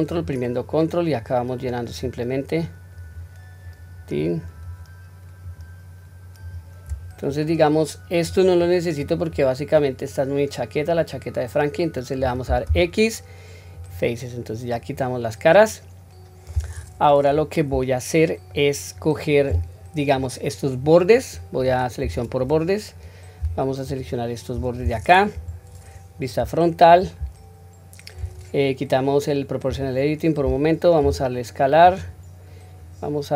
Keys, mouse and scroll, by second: 0.0 ctrl+click, 1.8 ctrl+click, 2.8 ctrl+click, 3.5 ctrl+click, 4.3 ctrl+click, 5.3 ctrl+click, 6.3 ctrl+click, 6.8-7.3 scroll down 1, 7.3-8.2 middle drag, 8.5-8.9 middle drag, 9.2 scroll down 1, 9.6-12.1 middle drag, 12.6 x, 14.6-16.3 middle drag, 17.3-18.4 middle drag, 20.0 middle click, 21.9 2, 22.4 middle click, 23.8 alt+click, 25.3 KP_1, 32.7-33.3 drag.